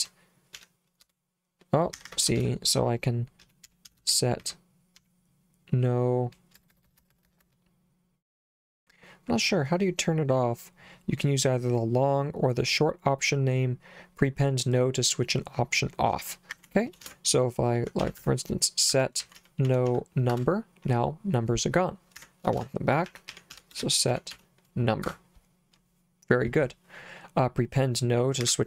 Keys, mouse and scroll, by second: 0.0-0.6 typing, 1.1 Return, 2.0 Escape, 2.4-5.0 typing, 6.6-7.5 typing, 16.3 Escape, 17.1-20.4 typing, 22.2 Escape, 22.6-24.9 typing, 25.1 Return, 28.5 Escape.